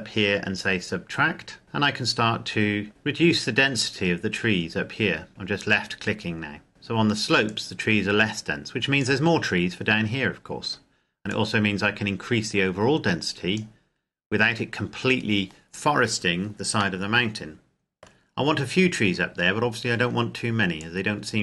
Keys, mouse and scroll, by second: 1.6 click, 2.9 click, 11.5 click, 17.0 middle click, 18.3-19.1 scroll up 1, 19.1-20.8 scroll down 1, 20.8 click.